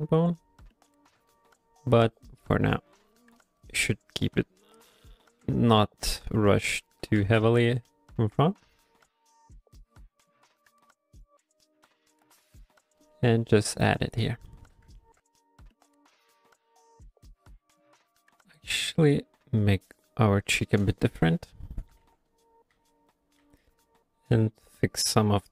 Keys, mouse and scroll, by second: 0.3 click, 0.6 click, 0.9 middle click, 1.3 shift+click, 1.6 shift+click, 2.1 click, 2.6 shift+click, 3.6 shift+click, 3.9 shift+click, 4.7 shift+middle click, 5.3 middle click, 5.6 shift+middle click, 6.0 shift+click, 6.3 shift+click, 6.8 shift+middle click, 7.3 ctrl+middle click, 7.5 middle click, 7.7 f, 8.3 f, 8.8 click, 9.1 f, 9.5 click, 9.8 click, 10.3 click, 10.3 f, 10.7 click, 10.9 click, 11.3 click, 11.6 click, 11.8 middle click, 12.2 click, 12.5 click, 12.8 click, 13.1 shift+click, 13.3 shift+click, 14.5 shift+middle click, 15.0 ctrl+middle click, 15.3 middle click, 16.3 g, 16.6 f, 17.2 click, 18.2 click, 18.6 middle click, 18.9 f, 19.4 click, 19.8 click, 20.9 click, 20.9-23.5 typing, 24.8 click, 25.3 click.